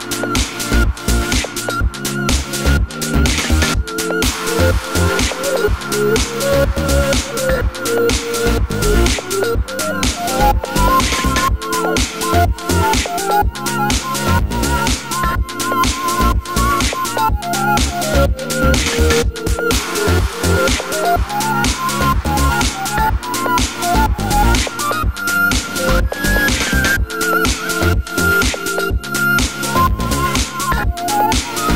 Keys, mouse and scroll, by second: 5.4 click, 6.3 click, 6.6 click, 6.7-8.5 drag, 7.6 Return, 11.6-12.2 drag, 20.0 click, 20.7 click, 22.4-23.4 right drag, 22.4 z, 23.4-25.0 drag, 25.7 n, 26.4 scroll up 1, 26.7 s, 28.9 click, 29.2 g, 30.1-30.9 drag, 30.9-31.7 middle drag.